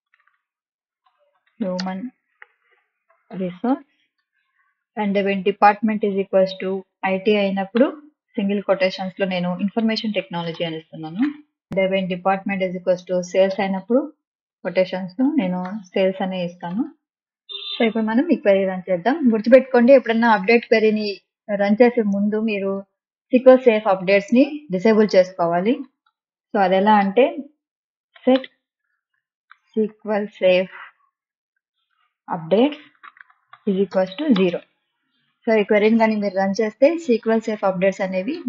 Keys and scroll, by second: 0.3-4.7 typing, 7.7 BackSpace, 8.2 ', 8.9 Left, 9.4-12.1 typing, 13.5 BackSpace, 13.7 ', 14.5 Left, 15.2-16.7 typing, 25.6-27.0 typing, 28.2-35.2 typing.